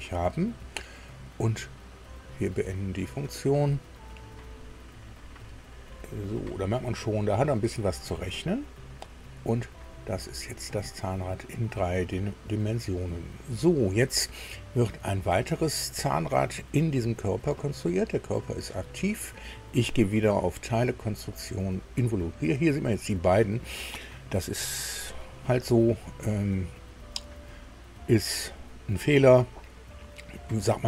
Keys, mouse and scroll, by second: 2.1 click, 6.8 middle click, 7.7 shift+middle click, 8.5-8.9 shift+scroll up 3, 10.2-11.0 scroll down 2, 11.1-12.9 middle drag, 16.9 click, 20.5 click, 25.5 click.